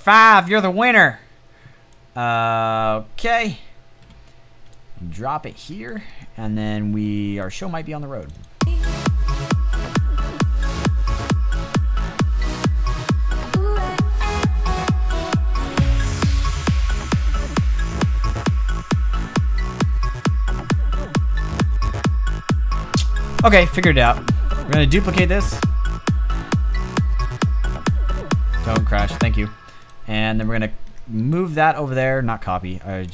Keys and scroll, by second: 28.9 space.